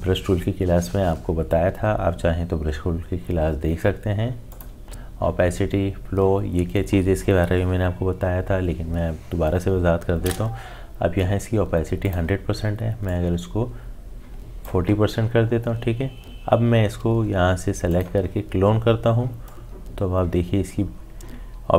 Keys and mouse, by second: 4.5 click, 12.0-21.7 drag.